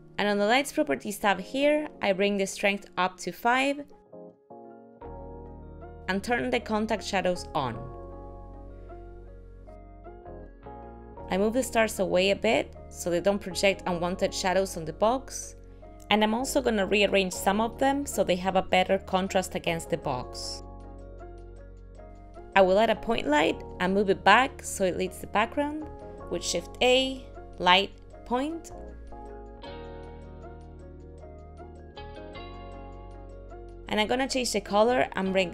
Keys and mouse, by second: 3.1 click, 7.4 click, 10.2 click, 11.2 KP_7, 11.4 click, 11.8 g, 13.4 middle click, 13.8 click, 14.0 g, 15.0 click, 15.1 g, 15.6 click, 15.6 g, 17.4 g, 17.6 click, 17.8 g, 19.4 g, 21.0 g, 21.2 click, 21.3 g, 21.8 click, 21.9 g, 24.7 middle click, 27.2 shift+a, 30.0 middle click, 30.9 g, 31.5 middle click, 33.3 shift+middle click, 34.4 click.